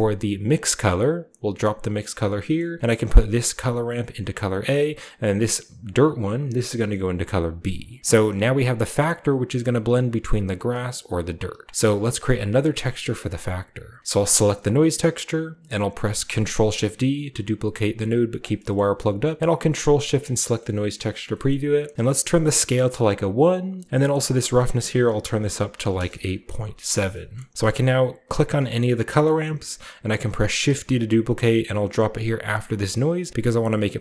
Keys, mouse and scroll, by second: 0.4 click, 2.0 click, 2.4 middle click, 2.6-3.4 typing, 2.9-3.5 drag, 2.9-4.3 scroll up 1, 3.9-4.6 drag, 5.0 drag, 5.8-8.6 drag, 7.4-8.2 typing, 11.7-13.1 drag, 12.2-13.0 typing, 14.4 click, 15.5-16.3 typing, 18.2 click, 18.7-20.2 scroll up 1, 19.7 ctrl+shift+middle click, 20.3 middle click, 20.9-23.0 scroll up 1, 22.0 middle click, 22.4 1, 22.4 middle click, 23.9 typing, 24.2-25.7 drag, 25.4-26.4 typing, 26.9-28.3 scroll down 1, 27.4-29.9 middle drag, 29.9 click, 29.9-30.7 typing, 32.7 click, 33.4 click.